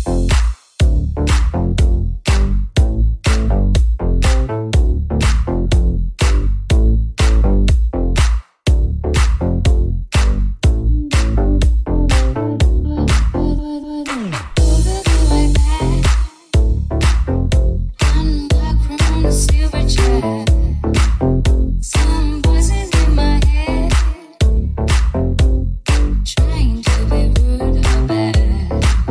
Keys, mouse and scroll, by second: 3.8 alt+s, 7.3 g, 9.1 alt+s, 11.3-25.4 middle drag, 13.8 Tab, 25.4 right click, 25.4-29.1 middle drag, 27.2 shift+a.